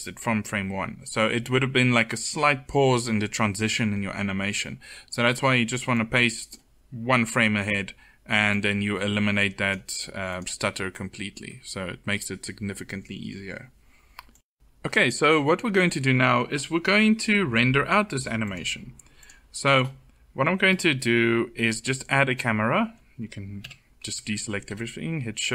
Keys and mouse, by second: 23.3 a, 24.2 shift+a.